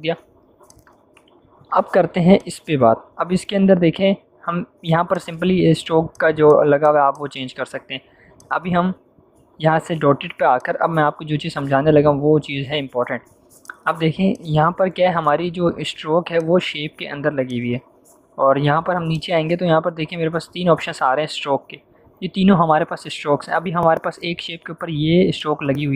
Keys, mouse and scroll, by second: 0.6 click, 5.1 click, 10.5 click, 13.6 click, 25.3 click.